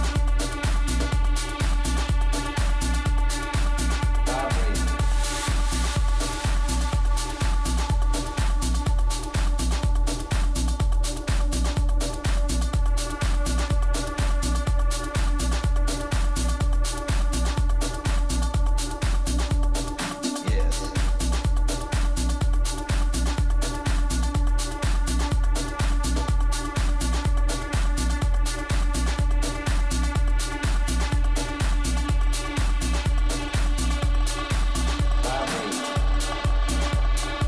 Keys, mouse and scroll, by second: 0.0-2.9 middle drag, 3.2-7.9 right drag, 6.7 click, 7.9 middle click, 9.3-11.2 drag, 11.7-16.6 middle drag, 16.3 a, 16.8-19.4 right drag, 19.1-20.9 middle drag, 20.9-22.8 right drag, 22.1-23.8 drag, 24.1-26.3 middle drag, 28.4 right click, 28.9-30.4 middle drag, 30.7-32.5 drag, 33.1-35.0 middle drag, 35.2 a, 35.7-37.4 right drag, 37.2-37.4 middle drag.